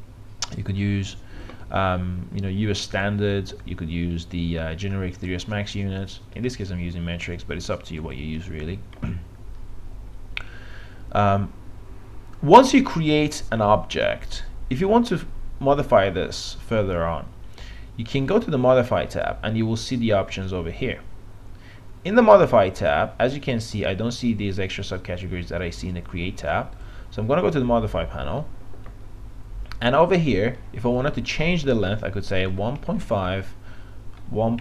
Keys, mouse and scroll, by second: 22.1-32.1 drag, 32.5 KP_1, 32.8 KP_Decimal, 33.0 KP_5, 33.3 Tab.